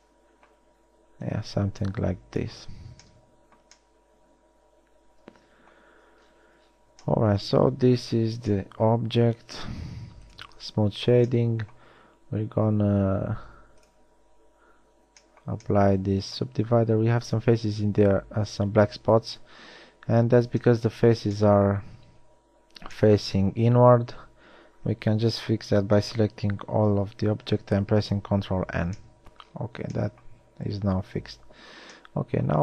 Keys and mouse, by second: 4.6 shift+middle click, 6.3 Tab, 9.3 t, 11.1 t, 20.5 Tab, 24.0 a, 24.3 a, 27.7 ctrl+n, 28.6 a, 31.5 KP_1.